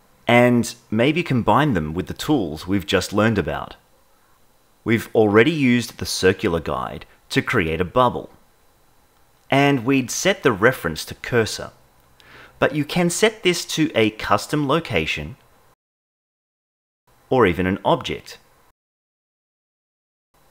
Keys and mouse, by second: 4.3-6.6 drag, 7.9-13.3 drag, 13.6 ctrl+z, 14.1-18.5 drag, 16.1 ctrl+Tab, 19.1 click.